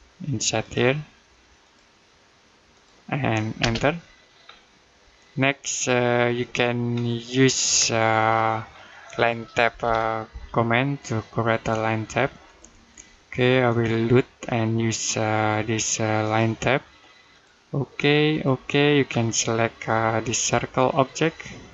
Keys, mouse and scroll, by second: 3.4 space, 4.3-5.1 scroll down 1, 5.1 middle click, 6.4-7.2 scroll up 1, 8.2 middle click, 9.5 l, 11.7-12.5 typing, 12.3 click, 18.9-20.2 scroll up 1, 20.2 click.